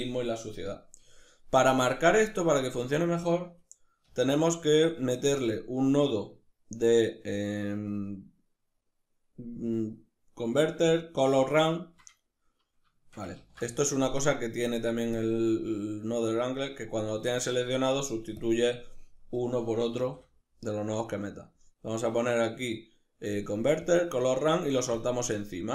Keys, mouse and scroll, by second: 3.7 shift+s, 13.2 ctrl+z, 14.0 right click, 14.8 click, 16.7 right click, 17.8 right click, 18.0 click, 19.6 shift+a, 24.6 click.